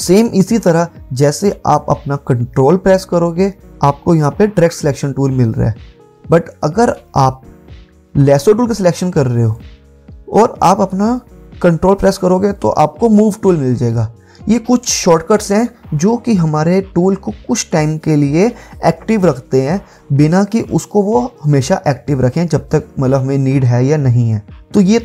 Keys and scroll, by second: 6.9 v, 8.1 i.